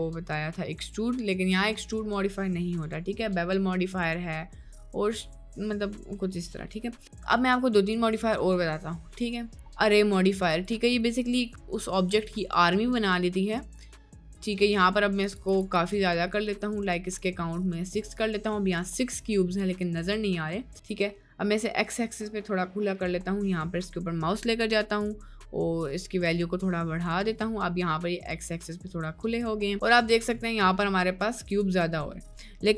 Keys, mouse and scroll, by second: 11.3 middle click, 12.3 middle click, 13.0 middle click, 15.2 click, 15.5 click, 17.1 click, 19.6 middle click, 25.0-27.1 drag, 27.7 middle click, 29.2 middle click, 29.7-30.1 middle drag, 30.5 middle click, 31.5 click, 32.5 middle click.